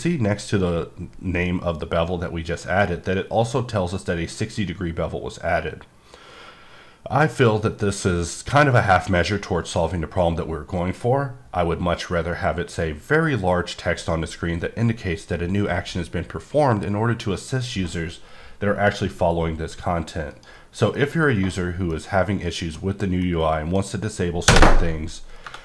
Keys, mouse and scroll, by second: 20.3 right click, 21.0 middle click, 21.6-21.9 scroll down 1, 21.9 middle click, 23.2 middle click, 25.4 Caps_Lock.